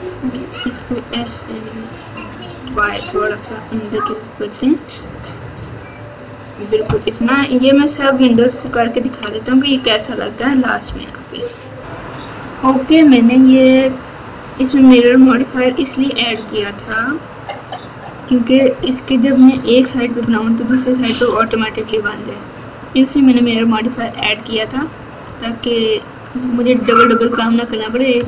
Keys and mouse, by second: 0.7 s, 8.6 ctrl+KP_2, 9.1 ctrl+KP_2, 12.9 alt+z, 14.7 KP_6, 15.0 KP_6, 15.2 KP_6, 16.6 KP_4, 20.2 KP_Add, 21.0 KP_Subtract, 21.2 KP_Subtract, 21.4 KP_Subtract, 21.6 KP_Subtract, 23.0-24.6 ctrl+KP_4, 25.2-26.1 ctrl+KP_6, 26.9-27.6 ctrl+KP_6, 28.1 KP_Add.